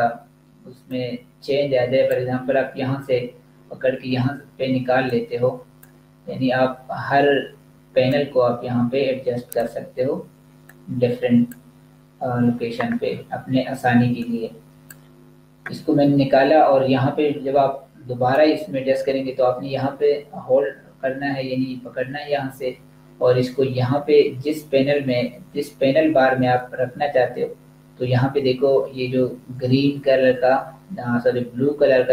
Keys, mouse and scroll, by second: 5.2 click, 14.5 click, 17.7 click.